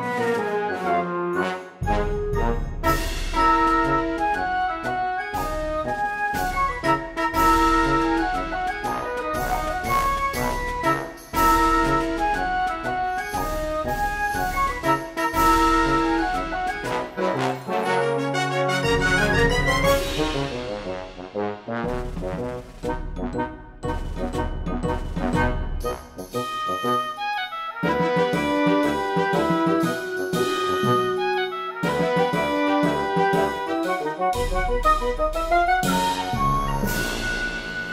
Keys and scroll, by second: 1.5-3.5 typing, 5.0 space, 5.2 e, 5.7 ctrl+z, 6.5 space, 7.4 space, 8.4 space, 9.1 p, 11.7 e, 12.1 ctrl+z, 12.6 ctrl+z, 13.3 space, 14.6-16.6 typing, 17.7 p, 18.0 space, 19.5 ctrl+z, 19.7 ctrl+z, 19.8 space, 24.6 ctrl+z, 27.3 ctrl+z, 27.7 ctrl+z, 29.1 ctrl+z, 29.3 p, 29.4 ctrl+z, 30.3 ctrl+alt+z, 34.6 g, 37.2 p.